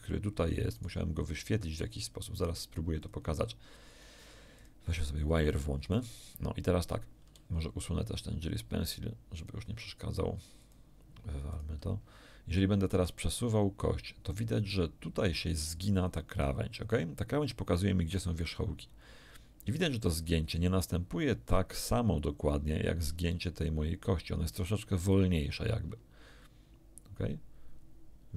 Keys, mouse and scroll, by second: 0.7 right click, 2.9 click, 4.5 click, 5.9 right click, 9.3 click, 9.7 click, 10.5 click, 11.5 click, 12.9 r, 15.5 click, 19.6 r.